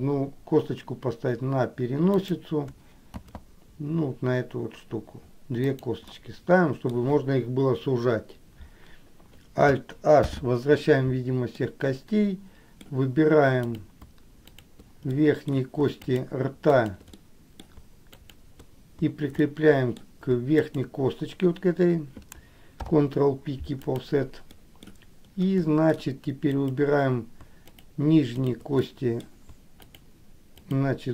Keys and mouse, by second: 3.5 shift+d, 6.3 middle click, 10.4 alt+h, 11.7 middle click, 12.8 middle click, 14.7 shift+click, 15.3 middle click, 16.2 shift+click, 17.3 shift+click, 17.5 middle click, 18.5 shift+click, 19.7 middle click, 20.9 shift+click, 23.0 ctrl+p, 24.7 middle click, 26.7 click, 27.8 shift+click, 28.6 shift+click, 29.0 middle click, 30.1 shift+click, 30.7 shift+click.